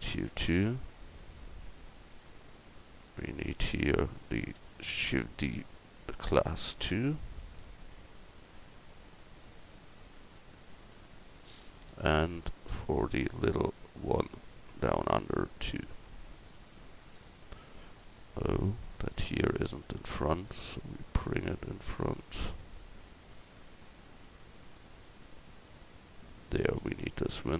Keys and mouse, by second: 1.9 Tab, 2.4 Tab, 3.5 Tab, 5.0 shift+d, 10.4 middle click, 11.6 middle click, 12.5 middle click, 18.6 right click, 20.2-21.5 middle drag, 21.5-22.7 drag, 24.4 Tab, 25.0 Tab, 26.8 l.